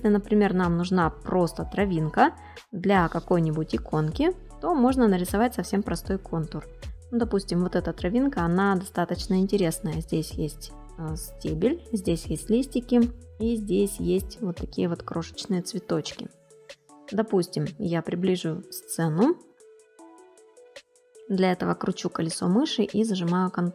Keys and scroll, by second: 15.1 space, 21.1 space.